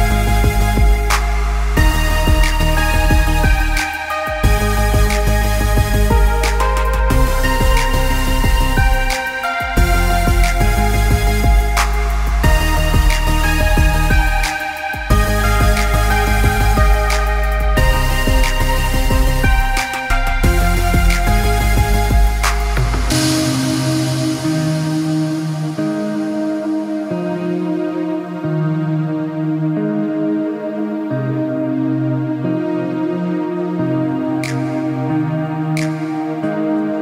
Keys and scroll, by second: 9.0 ctrl+space.